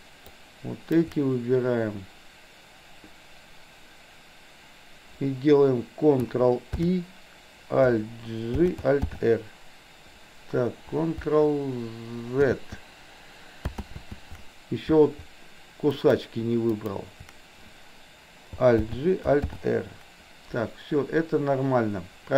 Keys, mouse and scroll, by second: 0.4-1.1 shift+drag, 6.7 ctrl+i, 8.6 alt+g, 9.1 alt+r, 12.5 ctrl+z, 13.9 ctrl+z, 16.0 shift+click, 16.7 shift+click, 18.9 alt+g, 19.5 alt+r.